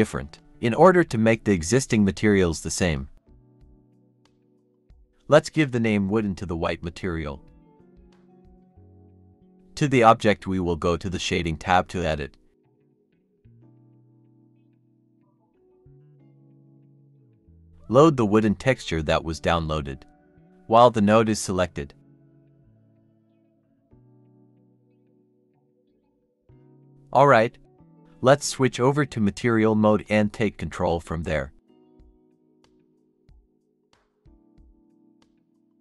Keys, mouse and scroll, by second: 5.7 double click, 6.3-6.9 typing, 7.4 Return, 9.1 Escape, 11.1-11.8 scroll down 1, 12.5 middle click, 15.1-15.5 scroll down 1, 15.5 middle click, 16.3-16.9 scroll down 1, 18.8 ctrl+shift+t, 20.5 double click, 23.6 double click, 26.3-28.9 scroll down 1.